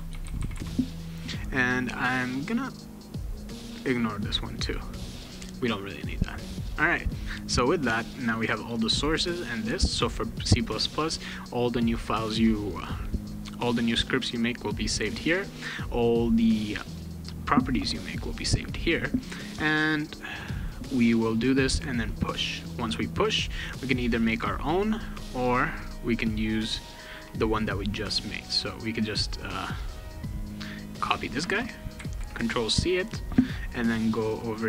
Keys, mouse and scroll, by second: 0.0-1.0 typing, 2.0 right click, 3.7 click, 7.9 click, 16.1 click, 19.6 click, 20.1 click, 21.8 click, 25.4 click, 26.1 click, 27.1 click, 28.5 click, 28.6 click, 29.9 click, 30.4 click, 31.9 ctrl+c, 33.2 click.